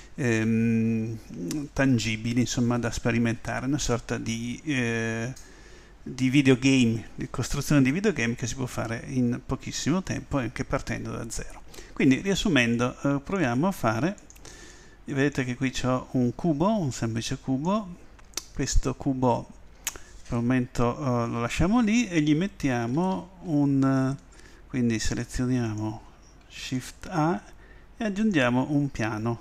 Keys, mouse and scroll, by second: 16.9-20.5 right drag, 24.0 a, 25.6 click.